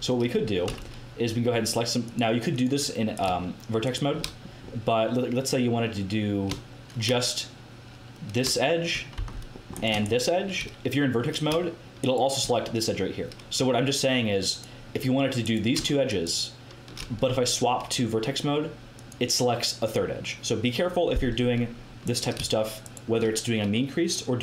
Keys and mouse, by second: 0.6 a, 2.0-3.1 right drag, 4.2 middle click, 4.7 middle click, 9.1 c, 10.0-15.4 drag, 16.3-22.0 drag, 22.0-24.4 right drag.